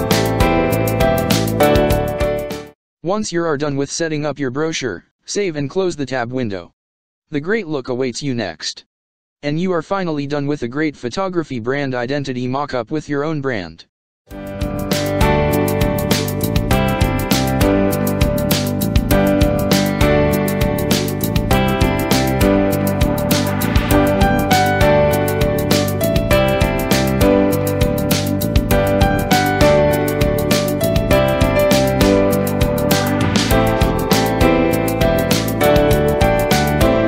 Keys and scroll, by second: 0.8 ctrl+space, 1.0 ctrl+space, 5.1 space, 8.5 ctrl+-, 10.5 ctrl+-, 18.7 ctrl+space, 19.0 ctrl+space, 22.6 ctrl+0.